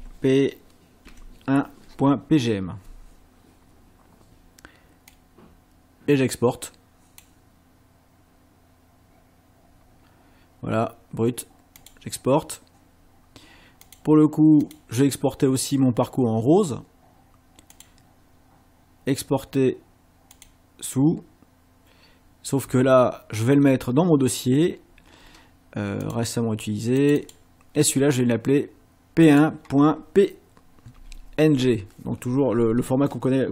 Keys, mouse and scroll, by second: 1.1 KP_1, 5.1 click, 11.8 click, 13.9 click, 14.6 click, 17.7 click, 20.3 click, 26.1 click, 27.0 click, 29.3 click, 31.0 BackSpace.